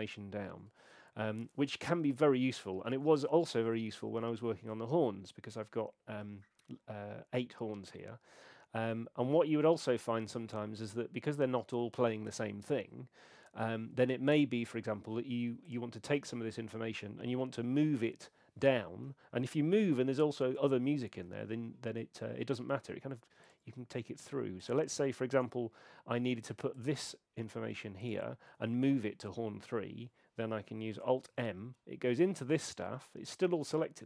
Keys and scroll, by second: 25.3 BackSpace, 31.3 alt+m.